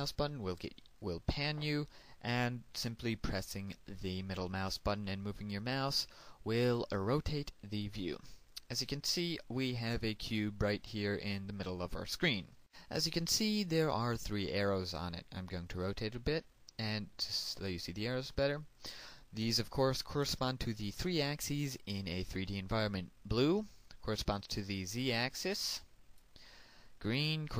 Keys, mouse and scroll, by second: 5.5-12.5 middle drag, 12.5 click, 16.5-20.5 middle drag, 25.2-27.5 drag.